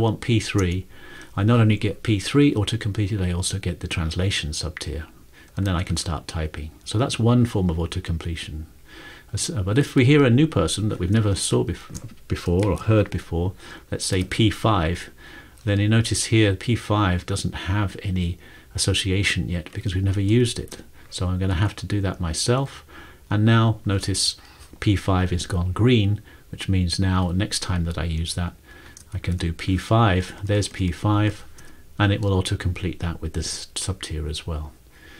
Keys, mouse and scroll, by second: 0.7 Return, 5.5-6.4 typing, 9.6 click, 10.5 Return, 12.6 p, 14.1 typing, 20.6 shift+., 21.5 Tab, 22.4-24.0 typing, 28.0-29.3 typing, 30.2 Down, 30.4-31.3 typing, 30.8 Down, 30.9 Down, 32.5 typing, 33.9-35.1 typing.